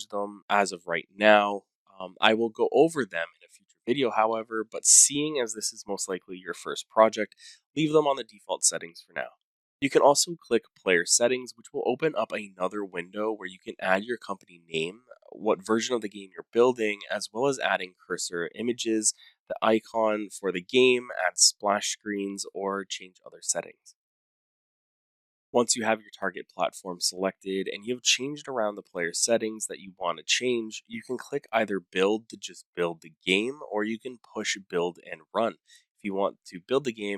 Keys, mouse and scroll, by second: 11.2 click, 11.6-14.1 drag, 15.5-17.7 typing, 20.4 click, 20.4 scroll, 21.5 click, 21.7 middle click, 21.9 scroll down 3, 21.9-22.6 scroll, 23.2 click, 23.4 scroll, 24.4-25.1 scroll, 25.2-25.8 scroll, 25.8-26.3 scroll down 8, 26.4 scroll, 27.2 click.